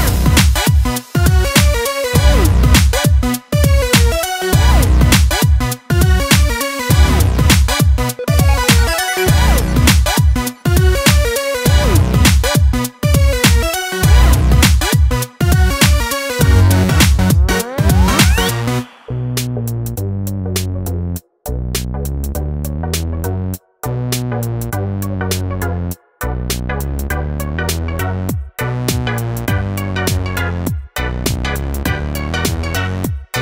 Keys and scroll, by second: 8.2 ctrl+space, 8.7 ctrl+space, 26.2 ctrl+space, 26.7 ctrl+space.